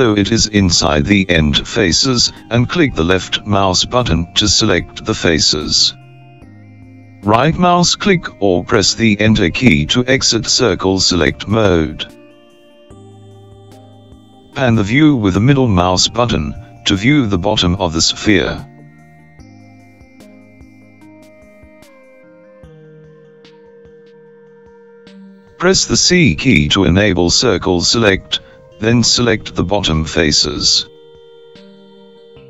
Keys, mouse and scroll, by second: 15.8-16.5 scroll down 1, 16.5-19.3 middle drag, 19.3-20.1 scroll up 4, 20.1-26.3 middle drag, 27.3 c.